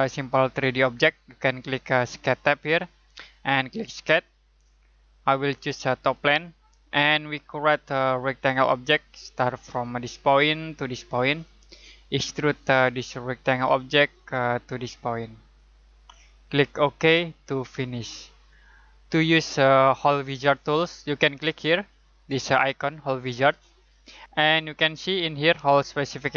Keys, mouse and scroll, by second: 2.6 click, 23.4 click.